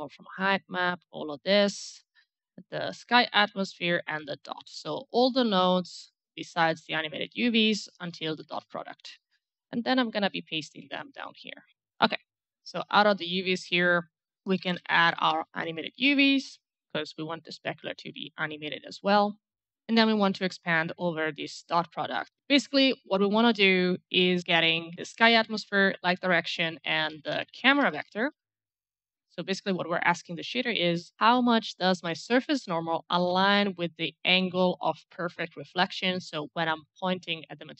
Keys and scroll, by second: 8.2 ctrl+c, 10.7 v, 14.1-15.2 typing, 16.2 Return, 26.4-28.8 typing.